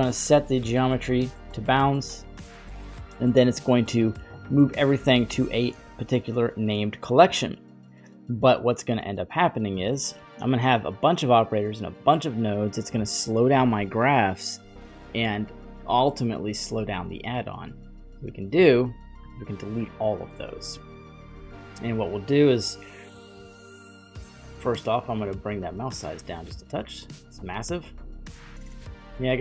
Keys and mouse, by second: 4.0 click, 4.3-5.5 drag, 9.4 middle click, 17.0-18.3 drag, 19.2 Delete, 20.5 n, 20.9 middle click, 24.0-28.4 drag, 28.9-29.4 middle drag.